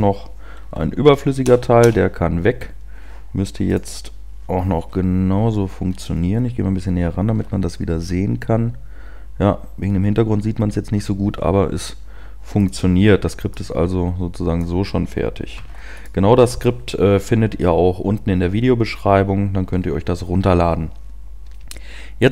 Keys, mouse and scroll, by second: 3.1 BackSpace, 3.7 click, 5.8 p, 6.1-6.7 scroll up 2.